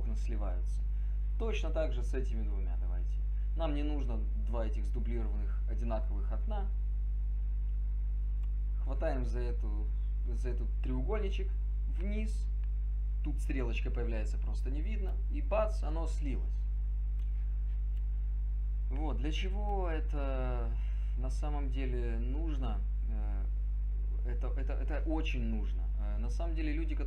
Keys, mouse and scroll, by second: 0.8 click.